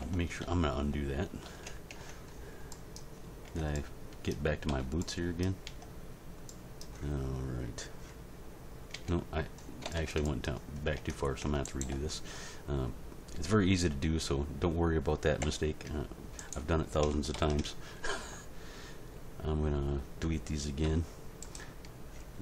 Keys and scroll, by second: 0.0 ctrl+z, 2.0 Tab, 3.4 Tab, 4.7 z, 5.6 Tab, 8.9 Tab, 11.0 Tab, 15.4 h, 17.3 ctrl+l, 20.8 x.